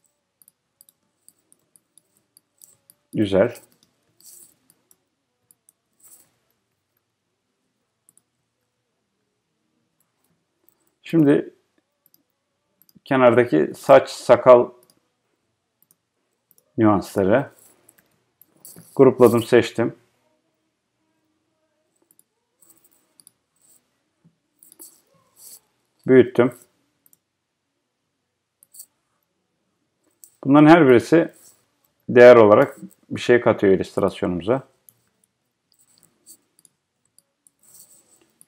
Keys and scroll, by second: 32.6 Return, 35.3 Return.